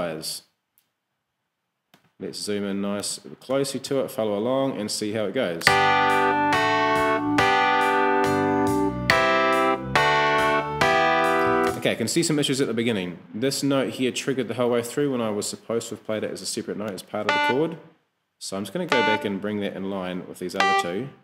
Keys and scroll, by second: 3.5 e, 5.6 space, 11.7 space.